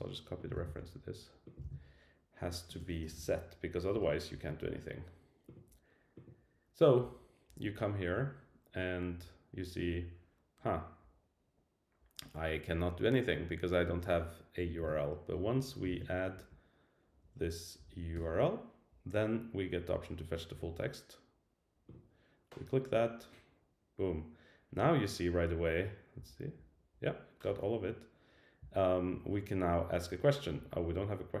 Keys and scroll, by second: 0.5 super+c, 1.6 super+v, 3.9 Return, 14.8 super+v, 15.6 Right, 16.4 Down, 17.4 Down, 18.0 Down, 18.1 Return.